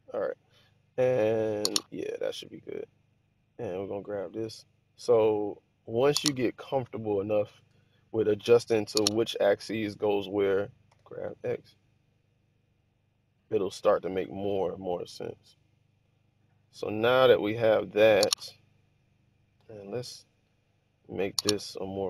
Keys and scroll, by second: 8.8 1, 10.6-11.8 typing.